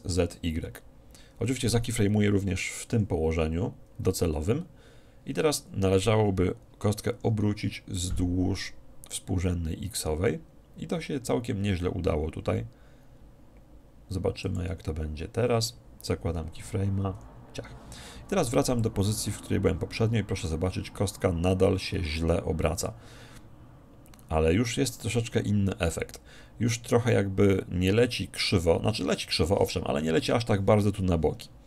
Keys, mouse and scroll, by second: 3.0 i, 7.1 r, 14.6-16.3 drag, 17.2 i, 18.8-20.6 drag.